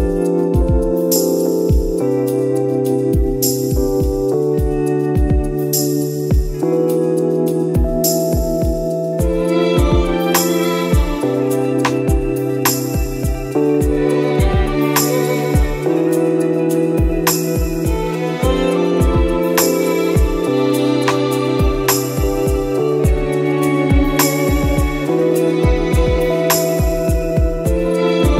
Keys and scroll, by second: 0.3 ctrl+d, 0.6 ctrl+-, 1.2 space, 2.4 space, 3.3 space, 4.5 space, 8.1 ctrl+-, 8.5 ctrl+-, 9.8 ctrl+e, 11.1 ctrl++, 11.9 space, 18.3 space, 24.5 ctrl+-, 24.6 ctrl++, 27.1 ctrl+d, 27.7 ctrl+d.